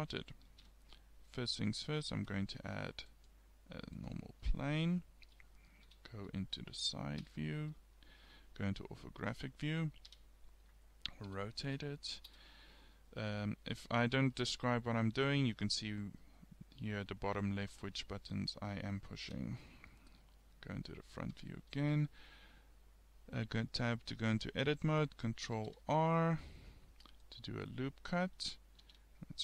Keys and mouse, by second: 0.5 shift+a, 5.9 KP_3, 7.3 KP_5, 10.1 r, 12.7 click, 15.0-16.0 middle drag, 16.8 middle click, 17.3-18.4 middle drag, 19.3 KP_1, 21.4 Tab, 25.6 ctrl+r.